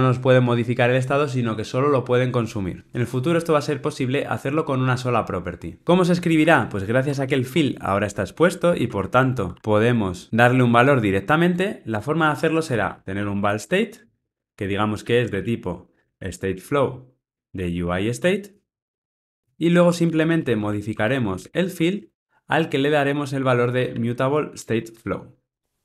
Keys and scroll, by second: 19.8 Tab, 24.6 Return.